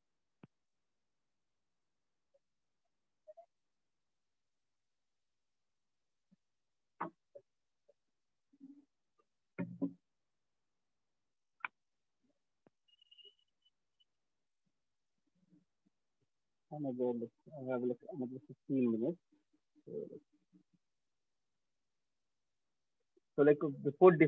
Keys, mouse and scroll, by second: 0.9 click, 2.5 click, 3.7 click, 5.4 click, 16.8 click, 17.0 click, 18.7 click, 19.2 click, 22.3 click, 22.9 alt+click.